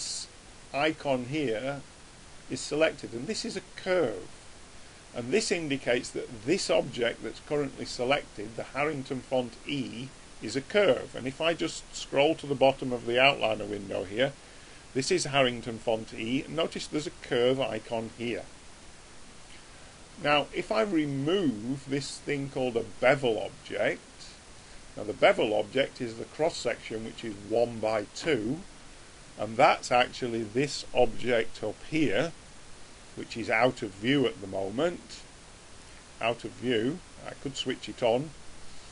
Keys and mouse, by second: 11.0-13.9 middle drag, 24.1 click, 29.3 click, 34.0 click, 37.7-38.9 drag.